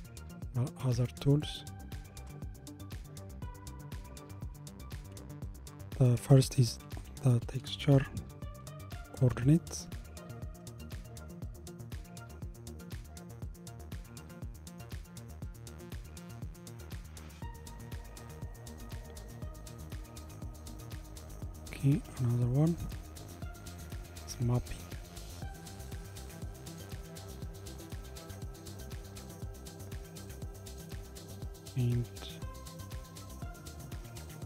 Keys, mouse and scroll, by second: 13.4-16.3 scroll up 1, 16.3-17.8 drag, 17.8-20.9 scroll up 1, 21.1 click, 22.1 shift+a, 25.7 p, 30.2 click, 31.0 shift+a.